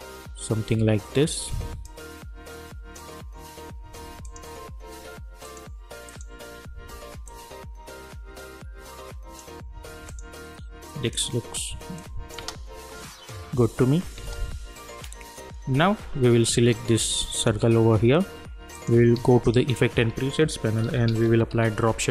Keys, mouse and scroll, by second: 1.8-12.4 drag, 12.4 space, 17.3 click, 19.1 ctrl+a, 20.6-22.0 typing.